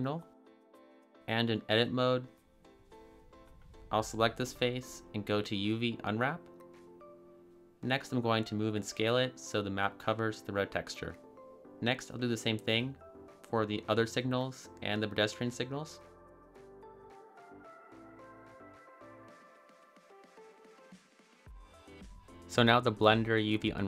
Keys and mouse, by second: 1.6-2.1 drag, 3.1 a, 3.5 a, 3.6 a, 4.5 click, 6.5 shift+click, 7.2 click, 8.7-10.0 typing, 9.2 click, 9.5 click, 10.0 click, 11.5 click, 12.6 click, 13.3 click, 14.0 a, 14.0 s, 14.6 g, 15.1 Tab, 15.5 click, 16.3 click, 16.6 a, 16.6 s, 16.8 click, 16.9 g, 17.1 click, 17.4 click, 17.6 click, 18.1 click, 19.7 click, 20.0 a, 20.0 s, 20.3 click, 20.4 g, 20.9 Tab, 21.3 click, 21.9 click, 22.2-23.2 typing, 22.4 click, 22.7 click, 23.1 click, 23.6 click.